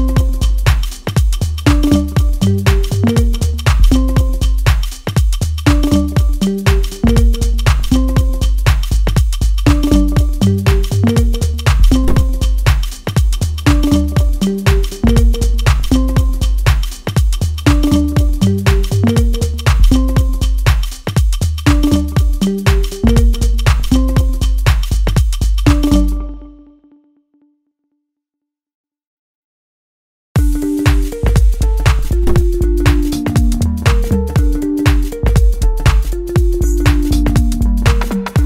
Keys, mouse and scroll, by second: 0.2 shift+d, 3.9-5.6 drag, 5.6 ctrl+z, 6.2-6.5 scroll down 1, 6.5-8.2 middle drag, 8.2 shift+d, 11.7 p, 13.3 click, 16.8-18.3 middle drag, 18.3-20.2 scroll down 1, 20.5 click, 24.1 click, 26.4 scroll up 1, 26.8-28.4 middle drag, 28.4 click, 30.1 middle click, 30.3 click, 31.4-32.8 drag, 32.8 ctrl+z, 33.7-38.4 drag.